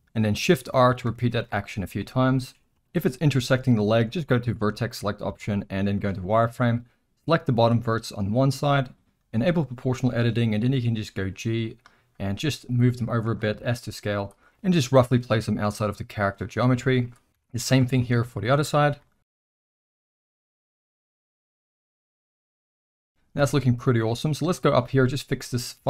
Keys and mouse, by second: 0.6-2.0 typing, 4.5 click, 5.2 z, 6.8 click, 9.5 click, 11.1 g, 13.6 s, 14.5 g, 14.5 z, 16.7 z, 17.3 z, 18.0 click, 19.0 g, 19.8 click, 20.1 s, 20.6 z, 21.1 Tab, 21.3-22.7 middle drag, 22.8 z, 23.0 Tab, 23.1 middle click, 23.4 alt+a, 24.2 middle click, 24.7 shift+middle click, 25.7 z.